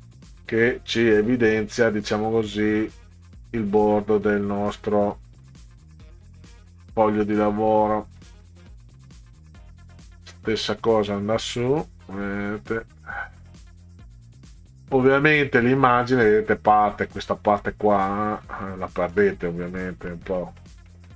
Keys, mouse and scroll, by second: 0.4 middle click, 1.0 middle click, 2.6-6.3 drag, 6.8 middle click, 6.9 scroll down 2, 7.4 middle drag, 8.2 middle drag, 8.9 middle click, 9.6 middle click, 10.6-10.9 middle drag, 12.3-14.6 drag, 15.0 middle click, 15.2 scroll up 2, 15.4 scroll down 2, 17.6-18.0 middle drag, 18.5 middle drag, 19.0 middle click, 19.4 middle drag, 19.9 middle click, 20.4 middle click, 20.9 middle click.